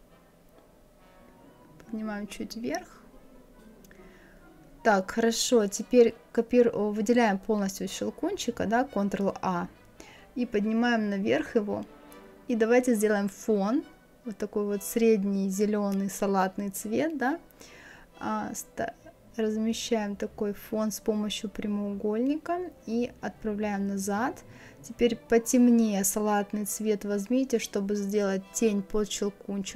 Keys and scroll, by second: 0.0 Up, 4.7 ctrl+a.